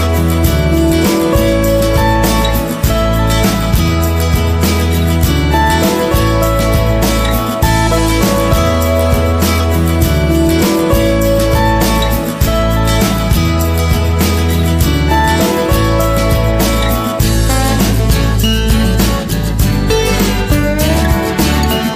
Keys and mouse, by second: 0.0 ctrl+l, 1.0 g, 2.7-4.0 middle drag, 4.5 Tab, 4.7 middle click, 5.4 middle drag, 5.9 right click, 6.2-6.6 middle drag, 6.8-7.8 middle drag, 7.9 KP_3, 8.4 shift+middle drag, 9.3 shift+middle drag, 9.9 KP_1, 10.5 shift+middle click, 11.3 Tab, 11.5 shift+middle click, 12.4 right click, 12.7 alt+z, 13.2 b, 14.5 s, 16.1 alt+z, 16.5 KP_3, 17.0 shift+middle click, 17.9 right click, 18.4 shift+a, 20.8 s.